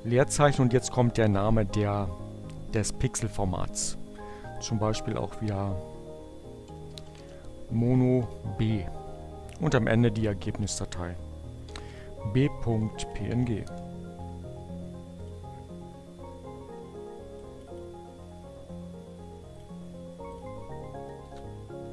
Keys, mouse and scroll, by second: 4.1-5.2 typing, 6.6 o, 7.0 b, 7.3 space, 9.5-10.4 typing, 11.7-12.9 typing, 13.1 Return, 14.6 click, 15.8 click, 19.0 drag, 19.8 click, 20.3 Up, 21.2 Left.